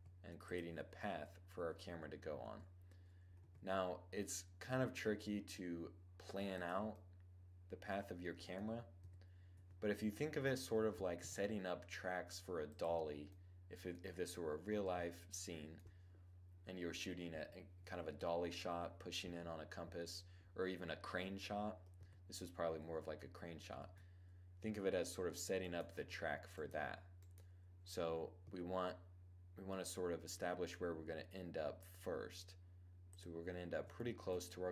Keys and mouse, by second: 1.0 1, 1.9 Tab, 2.9 g, 6.1-7.1 drag, 7.1-8.5 middle drag, 8.5 2, 9.1 1, 10.8 g, 12.3-16.4 drag, 19.5-21.3 middle drag, 21.5 1, 23.3 Tab, 24.3 Tab, 25.1-28.5 right drag, 25.5 Tab, 27.9 g, 28.4 middle click, 32.7-34.6 drag, 34.0 g, 34.6 middle click.